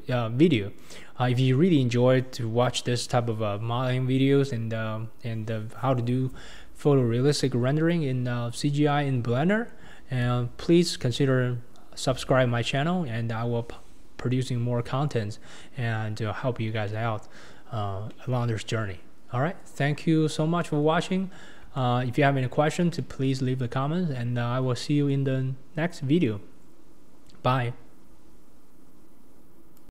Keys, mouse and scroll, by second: 0.4-3.1 scroll up 1, 4.2-8.2 scroll up 1, 15.3-16.0 scroll down 1, 16.0-16.5 scroll up 1, 16.5-16.9 scroll down 3, 16.9-17.7 middle drag, 17.7-18.1 scroll up 3, 18.1-19.8 middle drag, 19.8 KP_1, 20.1-20.6 scroll down 4, 20.6-21.0 shift+middle drag, 21.0-21.7 scroll up 4, 21.7-22.2 shift+middle drag, 22.2-23.0 scroll down 2, 23.0-29.9 shift+middle drag.